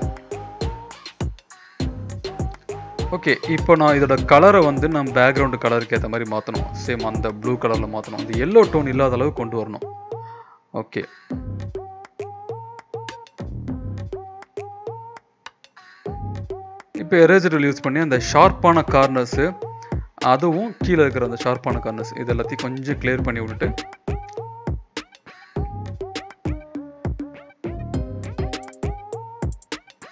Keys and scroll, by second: 1.8 ctrl+[, 2.2 ctrl+[, 6.3 ctrl+], 8.5 ctrl+b, 13.4 Return, 14.3 ctrl+b, 17.6 Return, 18.5 typing, 20.3 [, 20.5 [, 23.7-26.2 typing, 24.5 ctrl+-, 28.1-29.4 typing.